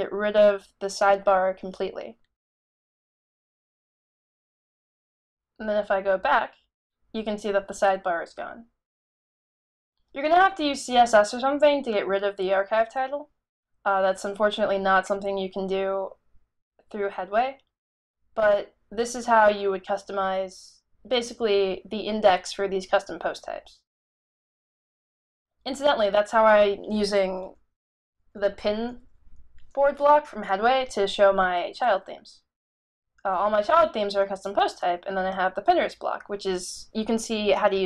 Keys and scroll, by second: 27.8-29.7 typing, 31.1 typing.